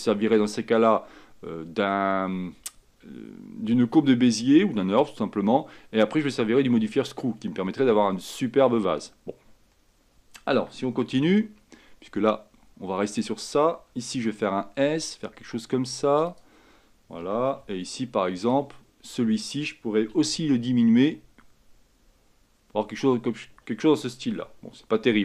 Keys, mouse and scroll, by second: 10.7 a, 11.2 b, 14.3 s, 17.3 a, 17.8 b, 20.3 s, 24.5-25.2 scroll up 2.